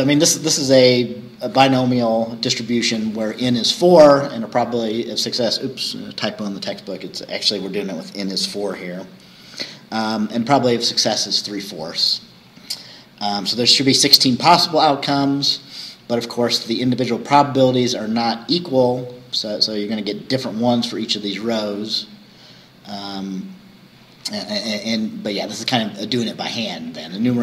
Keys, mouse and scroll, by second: 0.1-0.4 scroll up 2, 7.9-8.2 scroll down 1, 8.8-9.1 scroll up 1, 12.4-12.8 scroll down 1, 23.5-23.9 scroll down 2.